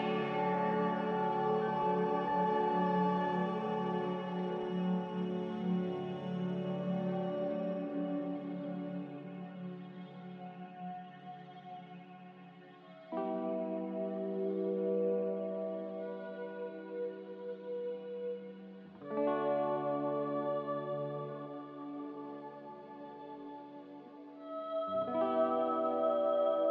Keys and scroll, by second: 3.6 b, 10.6 z, 11.7 Delete, 12.6 z, 22.8 Delete, 24.6 v.